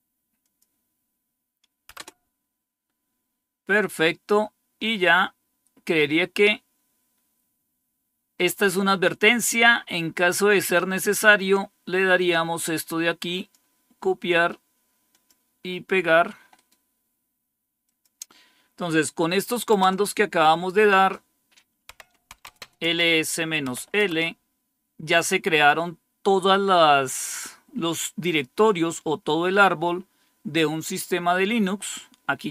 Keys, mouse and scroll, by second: 0.3 click, 1.8 Return, 3.9-4.6 scroll down 1, 4.6-5.5 scroll down 1, 5.5-8.0 scroll down 1, 12.0-13.8 drag, 14.1 right click, 14.8 right click, 15.0 click, 16.4-17.7 right drag, 17.7 click, 19.6 Return, 21.8-23.9 typing.